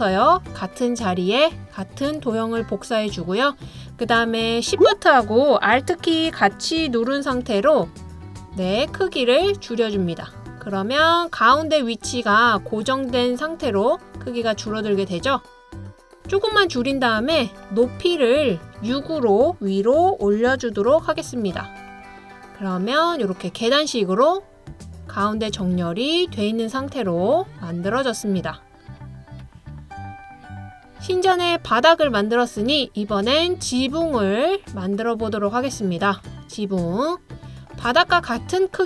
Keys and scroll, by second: 20.3-20.9 typing, 23.0 typing, 25.6 typing, 26.8 typing, 28.8 typing, 31.2-32.5 typing.